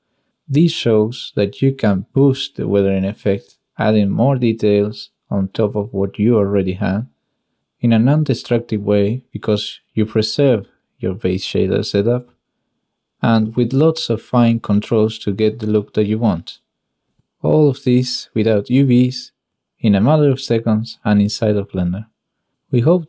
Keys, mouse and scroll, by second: 3.7 middle click, 8.3 middle drag, 8.5 drag, 8.8 middle click, 11.2 click, 12.9 click, 14.9 middle click, 14.9 drag, 15.2-15.8 shift+drag, 16.2 shift+middle click, 16.3 shift+click, 17.7 click, 18.4 click, 22.0 middle click.